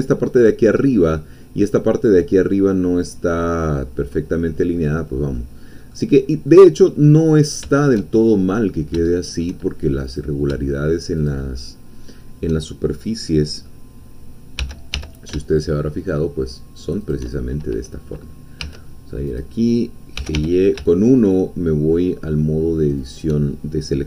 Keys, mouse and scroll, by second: 0.9-4.9 middle drag, 5.1 scroll down 2, 5.3 middle click, 6.1-6.5 scroll down 2, 6.5 middle click, 7.7 shift+middle click, 8.1-8.5 shift+scroll up 1, 8.5-10.0 middle drag, 10.2 click, 11.2 shift+click, 11.6 shift+middle click, 12.9-14.6 shift+middle drag, 14.6 g, 15.0 y, 17.0 shift+click, 17.3 shift+middle click, 18.7 1, 19.3 click, 20.2 g, 20.3 y, 23.0 shift+click.